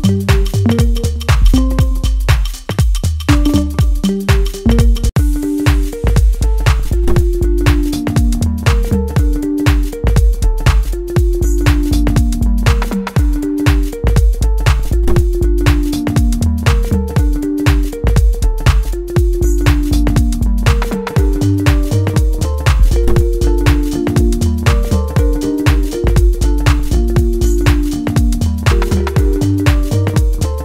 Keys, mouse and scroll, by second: 1.7 click, 2.2 middle click, 3.4-4.9 drag, 4.9 middle click, 6.1 click, 7.3-9.1 middle drag, 9.1-12.0 drag, 12.0-14.0 middle drag, 13.9 click, 14.0-17.8 drag, 17.8-19.8 middle drag, 19.8 click.